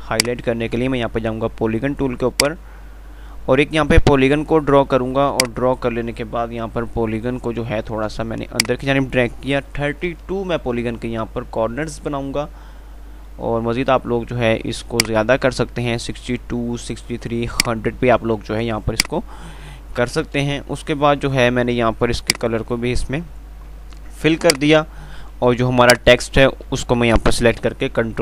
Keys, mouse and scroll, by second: 2.9 typing, 15.2-17.8 drag, 20.2 F11, 22.6 click, 24.7 right click, 26.1-28.0 drag, 28.0 Page_Up.